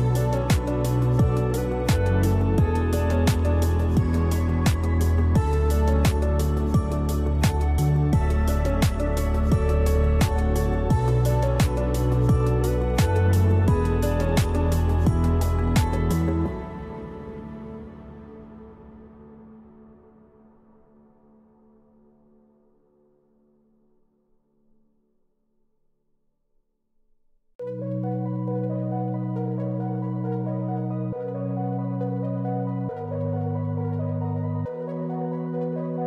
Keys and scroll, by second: 2.0 space, 3.4 space, 7.0 space, 9.1 space, 10.3 space, 13.5 space, 17.6 space.